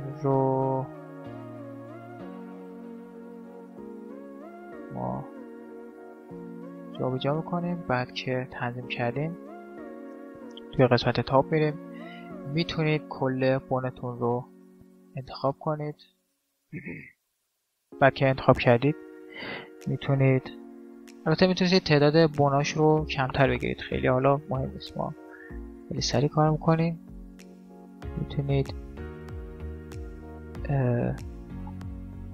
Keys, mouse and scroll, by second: 2.3 g, 4.2 right click, 4.5 middle click, 4.7-6.1 drag, 5.2 g, 8.3 middle click, 8.7-10.2 middle drag, 10.2 KP_7, 11.0 middle click, 11.9-13.0 middle drag, 13.0 right click, 13.8 middle click, 14.7 click, 14.7-17.7 right drag, 16.2-17.5 drag, 17.7-20.6 middle drag, 24.9 shift+d, 31.1-32.3 middle drag.